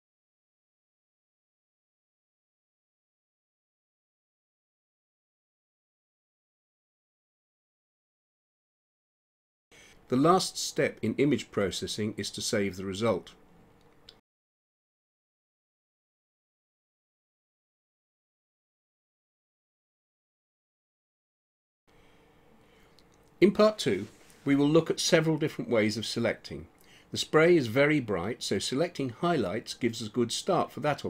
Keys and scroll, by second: 15.3-18.1 typing.